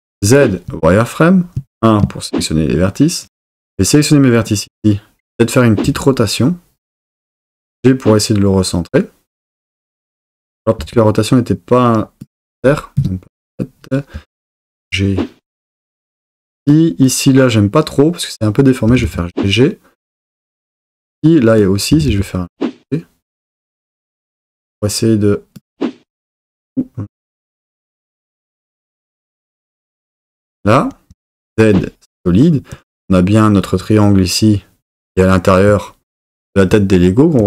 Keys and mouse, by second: 0.0 z, 1.6 1, 3.7 drag, 5.8 r, 7.0 click, 7.4 g, 9.3 click, 10.9 r, 13.0 KP_7, 14.1 g, 15.8 click, 18.9 g, 19.1 g, 21.9 g, 22.2 g, 26.4 g, 29.4 click, 31.1 z.